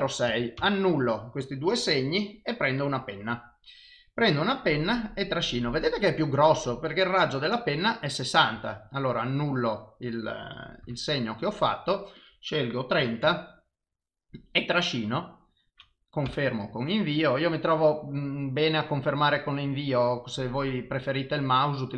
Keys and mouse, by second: 0.4 ctrl+z, 0.6 ctrl+z, 1.9 click, 4.2 click, 10.9 ctrl+z, 12.2 click, 14.3 click, 17.2 click.